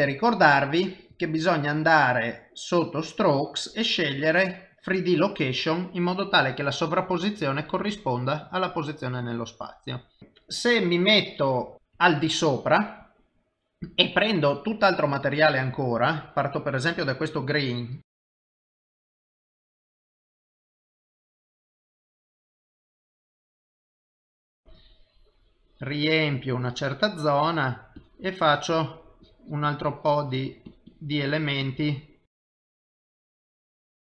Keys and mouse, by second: 1.1 click, 1.8 middle click, 3.0 click, 3.3 middle click, 4.2 click, 6.0 middle click, 11.7 KP_7, 15.1 click, 16.1 click, 18.6 click, 19.2 click, 20.6 click, 21.6 click, 22.2 f, 22.7 click, 22.9 ctrl+z, 23.9 click, 26.9 click, 28.0 click, 29.7 click, 29.9 click, 30.7 click, 30.9 click, 32.0 click, 32.6 click, 32.8-33.6 click, 33.2 click, 33.7 click, 33.8 click, 33.9 click.